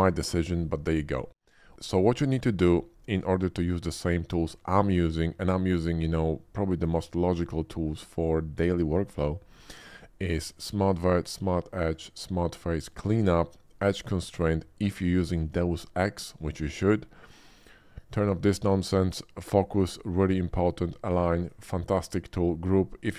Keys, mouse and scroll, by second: 3.2 typing, 10.5 click, 11.2 click, 11.9 click, 12.7 click, 17.6 click, 21.0 click, 21.4 click, 22.0 click.